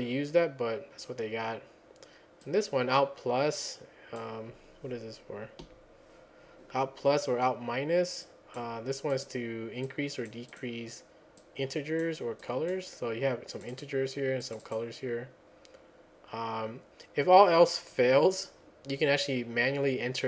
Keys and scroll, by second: 5.6 F10.